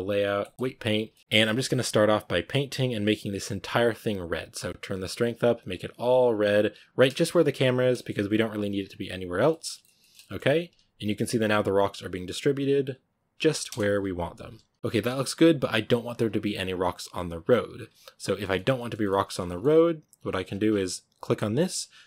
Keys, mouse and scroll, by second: 0.5 click, 1.0 shift+middle click, 1.2 click, 1.4 f, 1.7-7.0 drag, 7.0-7.3 shift+middle drag, 7.3-7.8 drag, 7.8-8.1 shift+middle drag, 8.1-9.3 drag, 9.3 middle click, 10.3-13.6 drag, 13.6 KP_0, 14.7 click, 14.7 shift+middle click, 15.1-18.1 drag, 18.1-22.0 shift+middle drag.